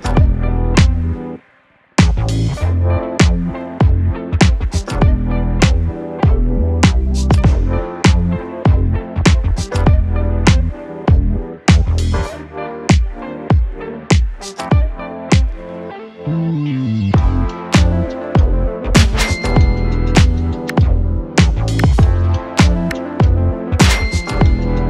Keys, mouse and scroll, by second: 5.1 right click, 6.7 click, 14.1 scroll up 1, 16.9 click, 19.0 scroll up 1, 19.7 middle click, 20.7 click, 21.0 s, 21.6-23.2 drag, 23.2-23.7 scroll down 1.